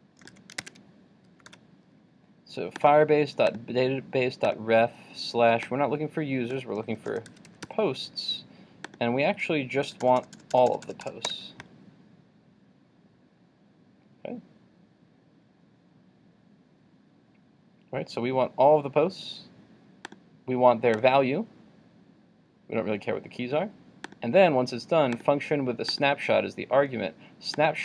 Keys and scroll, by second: 0.3 super+c, 0.7 super+Tab, 1.5 super+v.